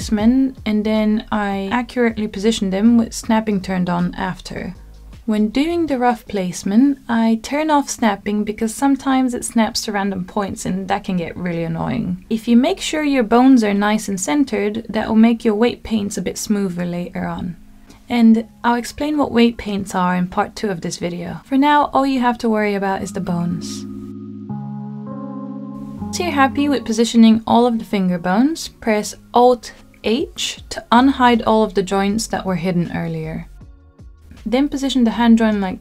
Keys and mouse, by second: 0.0-1.9 typing, 0.2 shift+middle click, 1.0 click, 1.5 click, 2.1 click, 2.2 middle click, 3.1 click, 3.8 g, 4.3 click, 4.4 middle click, 4.7 g, 4.9 click, 5.1 click, 5.7 click, 5.9 g, 6.3 click, 6.6 g, 7.5 click, 7.7 click, 8.2 g, 8.6 click, 8.7 click, 8.8 g, 9.2 click, 9.3 middle click, 10.0 g, 10.6 middle click, 11.0 shift+middle click, 11.3 g, 11.6 click, 11.9 g, 12.2 click, 12.4 middle click, 13.2 click, 13.4 g, 13.5 click, 13.8 middle click, 15.2 middle click, 15.3 click, 15.6 click, 16.1 g, 16.4 click, 16.5 middle click, 16.9 click, 17.2 middle click, 17.6 g, 18.0 r, 18.5 g, 18.8 click, 19.0 middle click, 19.8 click, 20.0 middle click, 20.7 click, 21.0 g, 21.6 click, 21.8 g, 22.4 click, 22.7 g, 22.9 click, 23.1 g, 23.4 click, 23.5 middle click, 24.2 click, 24.3 g, 24.5 click, 24.7-26.7 middle drag, 28.0 alt+h, 30.2-31.1 middle drag, 34.0-34.7 drag.